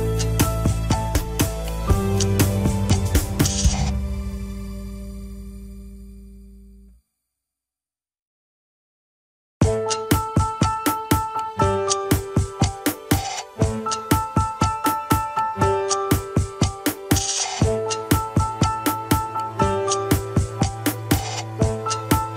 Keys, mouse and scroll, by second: 0.0 ctrl+click, 0.5 alt+z, 0.9-4.0 drag, 4.0 alt+z, 6.2-7.9 middle drag, 7.9 alt+z, 9.0 ctrl+click, 9.3 g, 11.1 KP_1, 11.5 alt+z, 11.8 scroll up 2, 12.5 shift+z, 13.0-14.1 middle drag, 14.1 g, 16.6 ctrl+click, 16.9 g, 17.8 ctrl+Tab, 19.3 shift+z, 19.7 middle click, 20.0 shift+z, 20.3-22.3 middle drag, 22.3 KP_1.